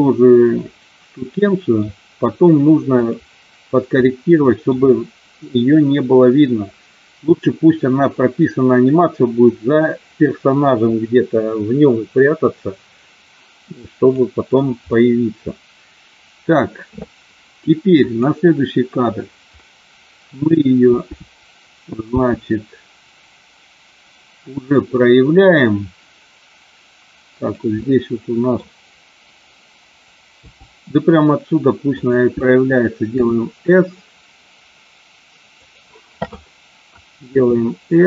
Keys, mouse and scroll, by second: 1.3 middle click, 3.9 middle click, 13.9 click, 14.9-16.4 middle drag, 18.0 click, 19.6-20.3 middle drag, 22.2 g, 27.3 click, 27.8-28.4 middle drag, 30.4 g, 31.9 click, 33.2 s, 35.4 click, 37.3 s.